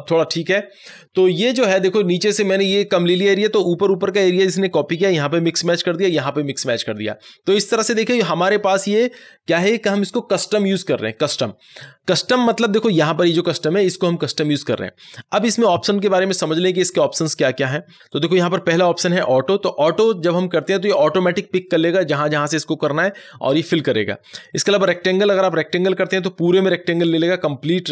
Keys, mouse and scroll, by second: 24.7 click.